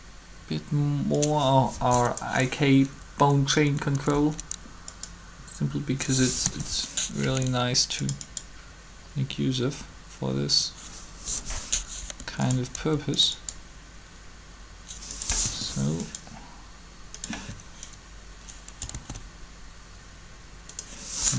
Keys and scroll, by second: 4.0 Up, 6.3 7, 7.2 r, 12.0 r, 12.7 r, 15.1 3, 18.9 alt+a.